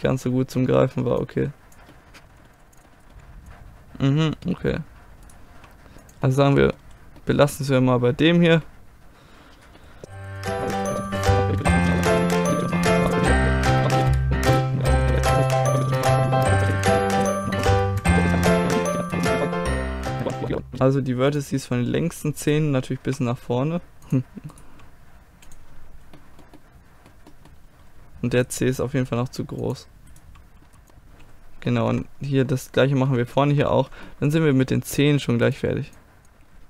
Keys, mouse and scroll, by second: 0.1-1.3 middle drag, 1.3-2.3 drag, 2.3 middle click, 2.8 middle click, 3.0 right click, 3.1 g, 3.3 middle click, 5.3 right click, 5.5 g, 7.3-9.5 middle drag, 10.2 right click, 10.4 a, 10.8 middle click, 10.8 click, 10.9 middle click, 11.6 click, 11.7 right click, 11.8 middle click, 12.2 a, 12.3 click, 12.3 i, 12.4 middle click, 12.5 click, 12.7 ctrl+z, 12.7 click, 12.9 middle click, 13.0 click, 13.2 click, 13.2 i, 13.4 ctrl+z, 13.5 click, 13.7 s, 13.8 click, 14.1 middle click, 14.4 middle click, 14.5 click, 14.6 middle click, 14.9 click, 14.9 right click, 15.1 ctrl+z, 15.2 right click, 15.3 middle click, 15.7 middle click, 15.9-17.6 drag, 16.3 middle click, 16.5 middle click, 16.5 right click, 16.6 right click, 16.8 right click, 17.1 middle click, 17.2 right click, 17.8 click, 17.8 right click, 17.9 s, 18.0 click, 18.3 right click, 18.7 ctrl+z, 18.9 middle click, 19.3 click, 19.5 right click, 19.8 click, 19.9 right click, 20.3 right click, 20.4 g, 20.5 g, 20.5 g, 21.3-22.4 middle drag, 22.4 right click, 23.2 g, 24.3 click, 24.7 g, 25.7 click, 25.8 right click, 26.3-28.3 middle drag, 28.3 right click, 29.1 g, 29.6 click, 30.2 g, 30.6 click, 30.7 g, 30.9-33.1 middle drag, 32.9 click, 35.5 right click, 36.0 click, 36.4 middle click, 36.6 a.